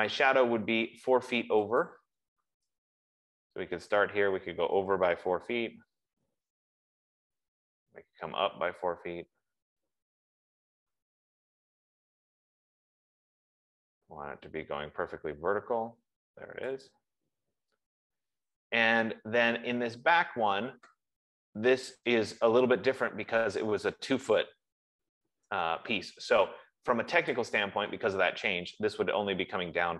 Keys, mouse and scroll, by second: 2.3 click, 6.7 Return, 8.2 Return, 10.8-11.5 scroll, 17.3 click, 18.2 Return, 20.5 scroll, 21.5 scroll, 21.7 F15, 27.5-29.9 drag.